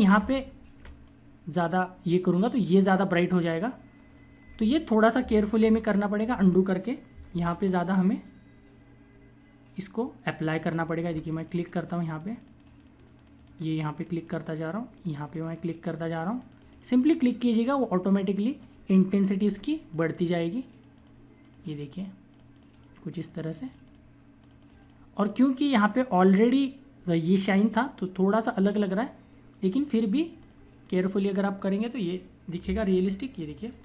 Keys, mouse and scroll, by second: 0.0-0.7 typing, 0.9 click, 5.5 ctrl+z, 7.0 typing, 8.2 click, 10.9 ], 11.2 click, 18.6 ], 19.1 click, 28.4 click.